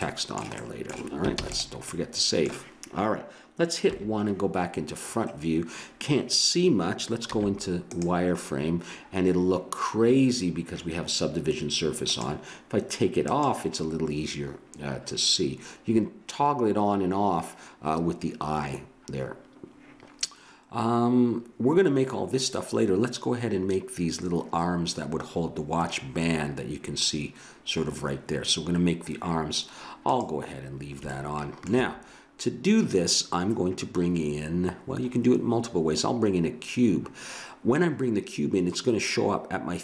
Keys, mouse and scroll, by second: 0.0-2.4 middle drag, 1.3 ctrl+s, 3.9 KP_1, 5.2-7.0 middle drag, 7.2 z, 12.1-17.9 drag, 20.2 middle click, 26.2-27.9 middle drag, 28.3-29.9 middle drag, 31.1-32.5 drag, 32.5-33.9 middle drag.